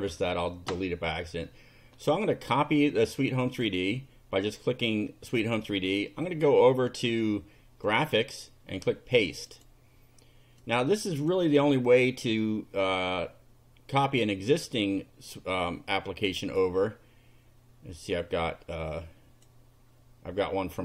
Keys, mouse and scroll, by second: 3.5 click, 7.9 click, 9.5 click, 10.7-12.8 drag, 16.5 click, 18.8 click, 20.7 click.